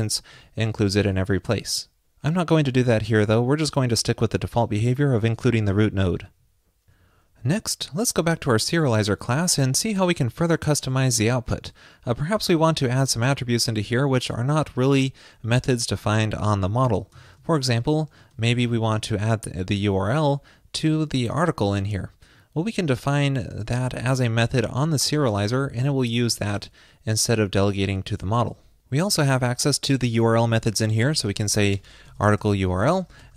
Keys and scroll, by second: 0.6 super+/, 1.2 super+s.